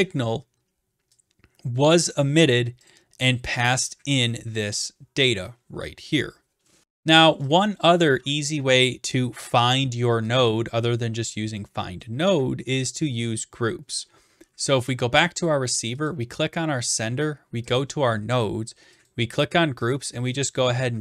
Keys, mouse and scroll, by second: 0.1-0.5 scroll, 0.5 scroll down 4, 2.4 click, 2.9 click, 6.1 click, 7.8 click, 12.0 click, 14.9 click, 16.0 click, 17.8 click, 19.1 click, 19.9 click.